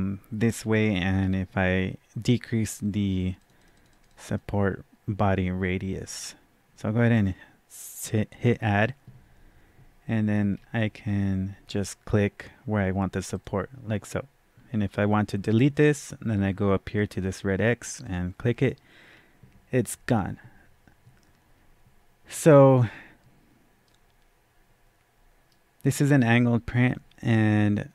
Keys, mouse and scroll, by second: 3.3 click, 3.5 double click, 3.7 click, 3.8 click, 4.0 double click, 4.2 click, 8.4 click, 10.5-11.0 scroll down 1, 11.0 scroll up 1, 13.3 click, 18.0 click, 19.1-20.8 scroll down 1, 23.8-27.9 right drag, 23.8 scroll down 1.